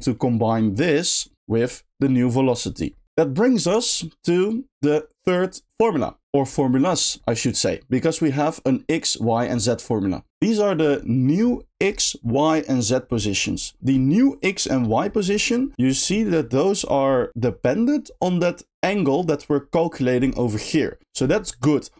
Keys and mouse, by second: 0.9 middle click, 3.0 middle click, 3.1 middle click, 4.7 middle click, 18.9 middle click, 20.5 middle click.